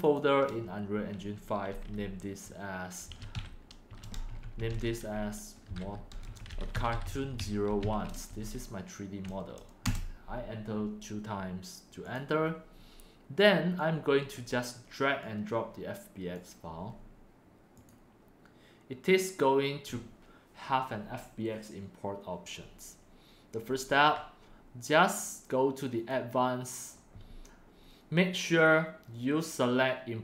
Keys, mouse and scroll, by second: 2.6 click, 2.9-8.3 typing, 11.9-14.4 drag, 15.1-16.4 drag, 17.7 click, 18.1 click, 18.4 drag, 19.5 click, 23.5 drag, 25.8 click.